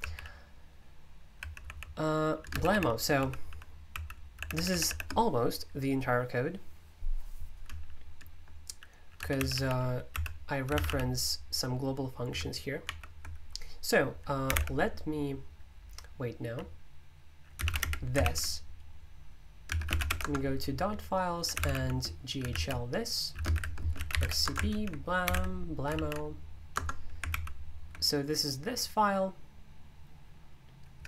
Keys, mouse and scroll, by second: 0.0 k, 1.6-4.8 typing, 8.9-11.2 typing, 12.8 ctrl+o, 14.2-14.9 typing, 17.5-25.7 typing, 24.7 super+l, 25.9 ctrl+v, 26.7 Return, 27.3 super+l, 30.6-31.0 typing.